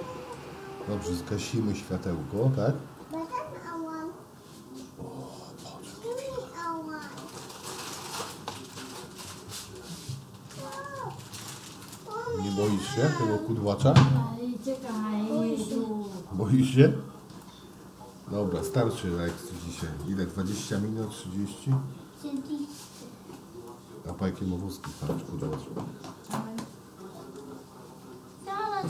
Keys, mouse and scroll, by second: 3.1 click, 4.2-7.2 drag, 8.0 middle click, 8.7-10.9 middle drag, 12.0-13.8 middle drag, 14.3-14.8 middle drag, 17.6-18.7 middle drag, 20.2 middle click, 21.5 middle click, 23.7 middle click, 26.3-27.5 middle drag.